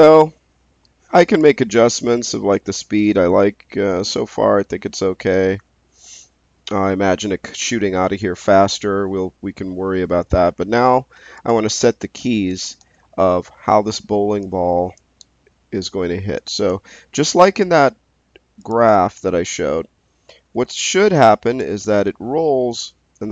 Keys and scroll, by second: 12.7 space, 20.6 space.